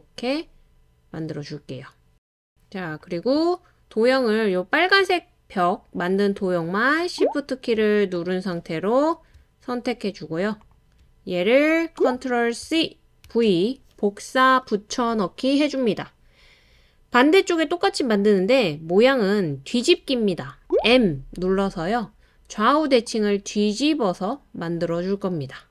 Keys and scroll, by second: 12.6 super+c, 13.2 super+v, 20.8 m.